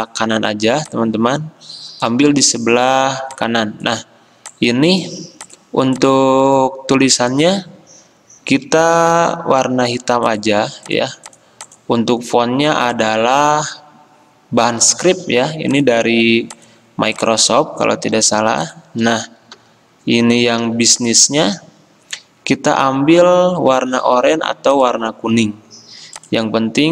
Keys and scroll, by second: 9.2 d, 18.2 i, 19.6 c, 20.7 v.